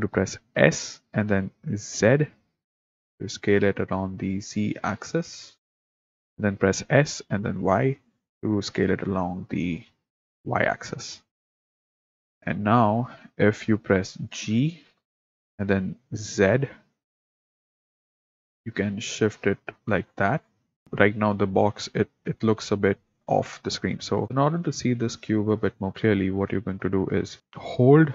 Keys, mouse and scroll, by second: 0.6 s, 6.8 s, 15.9 g.